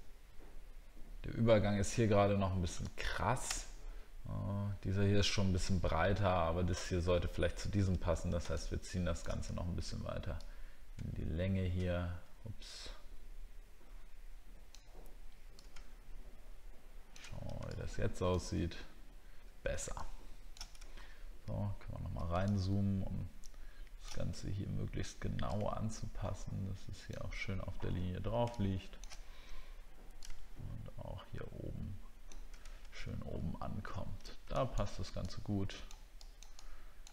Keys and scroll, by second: 21.1 alt+scroll up 1, 32.9 alt+scroll up 1.